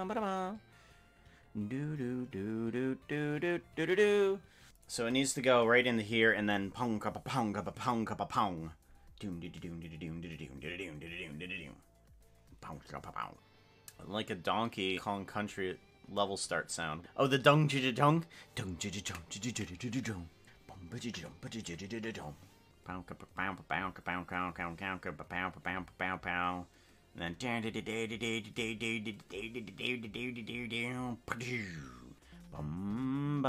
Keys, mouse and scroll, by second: 4.7 ctrl+z, 4.7 click, 4.9 space, 5.3 space.